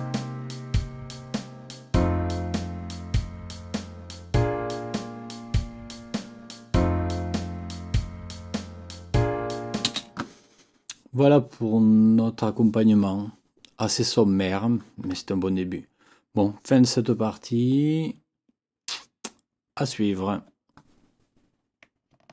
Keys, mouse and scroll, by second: 9.8 space.